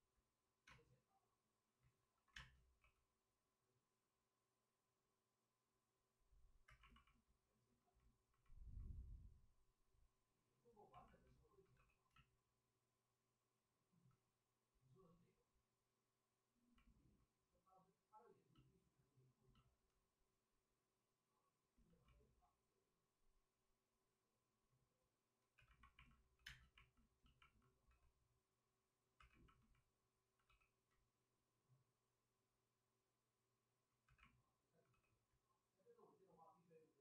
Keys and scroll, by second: 1.8 ctrl+d, 1.8 space, 2.3 ctrl+d, 2.3 space, 2.7 w, 6.6 2, 11.7 w, 26.3 2, 27.8 w, 29.1 2, 30.4 w, 33.4-34.8 typing.